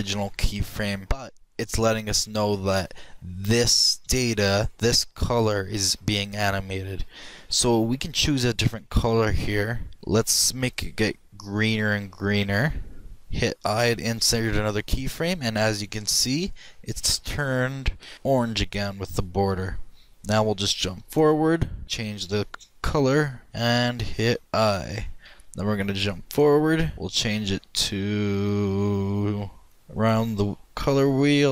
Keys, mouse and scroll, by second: 8.4-10.0 drag, 14.0 |, 21.0 click, 22.1-23.5 drag, 25.1 |, 26.4-30.7 drag.